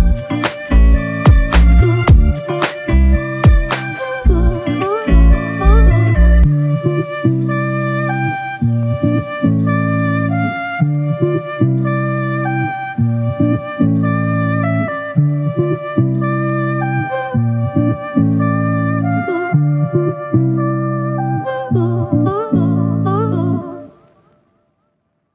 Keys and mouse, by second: 8.3 double click, 16.6 double click, 25.2 alt+click.